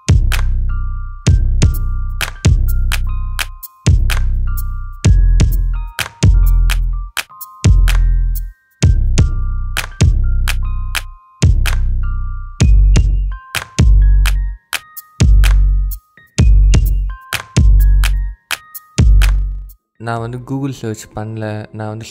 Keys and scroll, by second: 2.0 Tab, 2.5 BackSpace, 3.0 Tab, 4.5 Tab, 5.9 Tab, 7.3 Tab, 10.2 Tab, 12.7 Tab, 13.2 BackSpace, 14.6 Tab, 15.9 Tab, 17.0 Tab, 18.7 Tab, 19.9 Tab, 21.0 Tab.